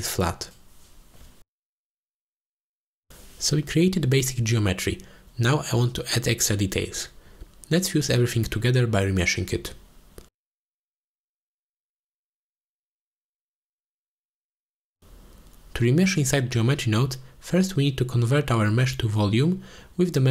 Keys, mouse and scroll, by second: 2.4 shift+click, 3.1 click, 3.8 m, 4.6 m, 5.1 m, 5.6 m, 6.3 click, 7.0 ctrl+s, 7.9 click, 9.0 click, 9.9 middle click, 10.4 click, 10.8 g, 11.1 ctrl+j, 11.3 click, 11.5 ctrl+j, 11.9 ctrl+s, 12.4 F2, 13.4 click, 13.7 F2, 14.8 l, 15.2 shift+click, 15.6 click, 18.8 click, 19.4 shift+a.